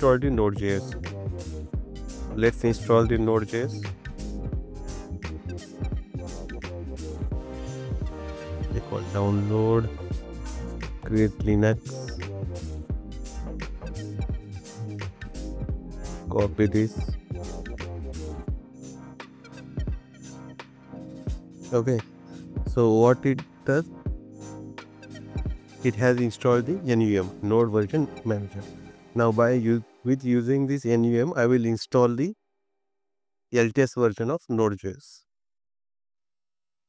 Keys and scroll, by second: 4.2 BackSpace, 15.4 super+c, 17.8 super+v, 24.7 super+c, 25.6 super+v.